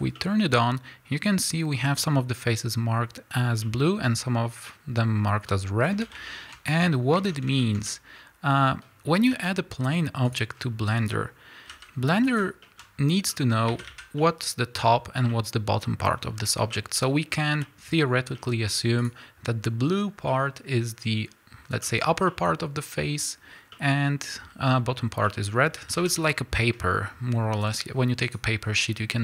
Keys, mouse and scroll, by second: 0.2-12.4 middle drag, 6.7 scroll up 1, 7.2 Tab, 8.9-10.0 scroll down 2, 10.0-10.3 scroll down 1, 10.3 shift+a, 10.6-10.9 scroll down 2, 10.9 scroll up 1, 11.7 g, 12.4 shift+click, 12.6-19.1 shift+middle drag, 12.9-13.3 scroll up 1, 13.7 a, 16.3-16.7 scroll up 2, 17.1-17.6 scroll down 2, 18.2 scroll up 1, 19.1 click, 20.3-28.3 middle drag, 25.8 a, 28.3 click.